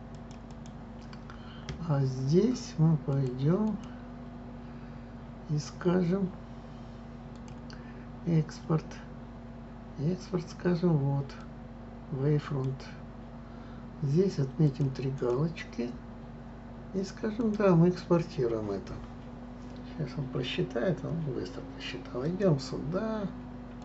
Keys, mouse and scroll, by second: 3.1 click, 3.6-6.6 drag, 7.3-10.3 drag, 12.7 click.